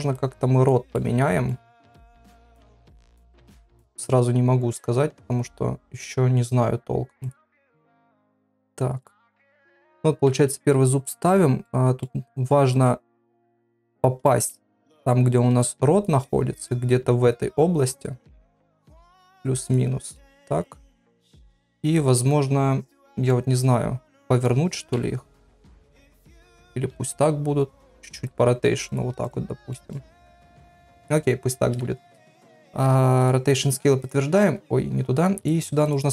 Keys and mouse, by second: 0.1 click, 0.9 middle click, 1.9 click, 8.3 click, 9.2 middle click, 10.3 KP_3, 11.6 middle click, 12.7 click, 13.6 middle click, 14.5 shift+middle click, 15.6 click, 16.2 middle click, 17.8 click, 18.7 click, 20.1 middle click, 21.7 middle click, 23.2-24.5 middle drag, 24.9 KP_1, 25.6 click, 26.4 click, 27.8 r, 28.4 g, 29.7 middle click, 32.3 ctrl+a.